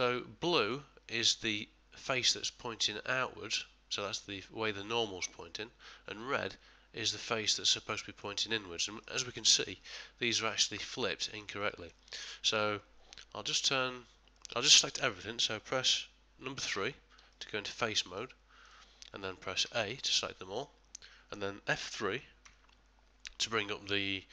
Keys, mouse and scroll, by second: 0.0 middle click, 7.2 middle click, 8.8 ctrl+middle click, 9.2 middle click, 10.2 middle click, 10.7 middle click, 11.7 shift+middle click, 12.2 middle click, 14.3 middle click, 16.7 3, 17.3 middle click, 18.6 click, 19.6 a, 20.6 middle click, 22.4 F3.